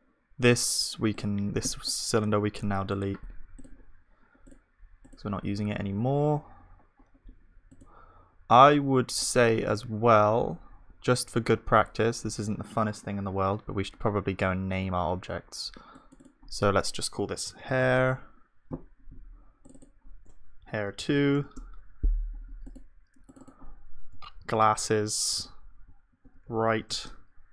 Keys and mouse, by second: 3.6-5.0 right drag, 5.0-7.0 drag, 6.5 right click, 9.9-18.7 drag, 24.8-26.9 drag, 24.8 s.